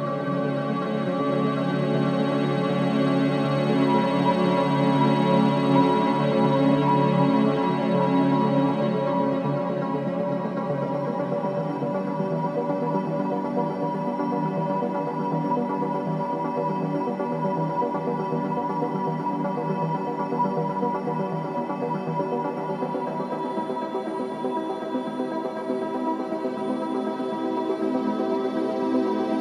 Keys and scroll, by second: 2.1 3, 2.7 4, 9.2 1, 9.3 Return.